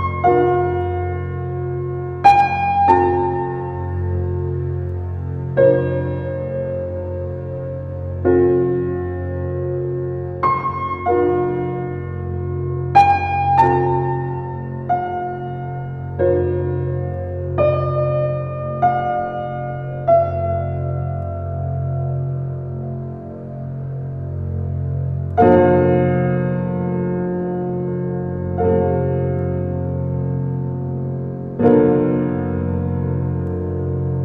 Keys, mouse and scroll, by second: 0.7 alt+middle drag, 1.5 s, 3.6 g, 5.3 g, 8.7 s, 9.9 alt+middle drag, 11.2 alt+middle click, 11.8-12.5 shift+middle drag, 12.5 g, 16.5-18.4 middle drag, 18.7 click, 20.2 drag, 20.7-22.6 drag, 23.5 click, 25.1-27.1 drag, 27.1-28.0 scroll down 1, 28.0-31.3 drag, 31.7 click, 32.0 click, 32.7 click, 33.1 click, 33.4 click, 33.8 click.